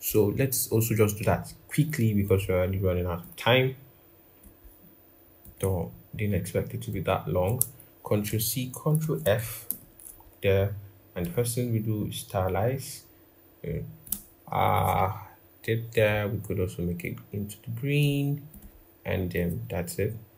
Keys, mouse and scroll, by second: 1.1 right click, 8.0 ctrl+c, 8.7 typing, 8.7 ctrl+f, 9.4 ctrl+=, 9.5 ctrl+=.